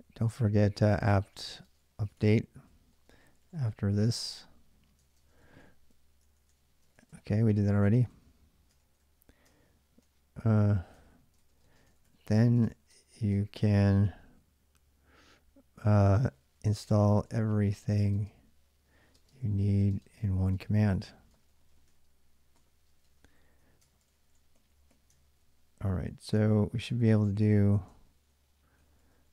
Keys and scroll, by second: 0.0-7.2 typing, 7.7 ctrl+a, 7.9 ctrl+a, 8.8 ctrl+a, 9.3 ctrl+[, 9.3-13.5 typing, 15.8-29.2 typing.